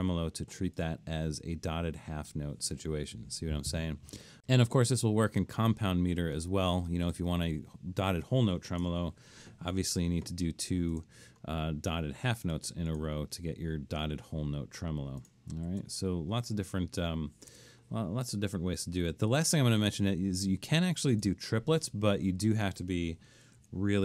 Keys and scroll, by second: 3.3 Delete, 8.6-10.4 typing, 10.5 Escape, 15.7 super+z, 16.4 super+z, 17.5 BackSpace, 23.6 alt+3.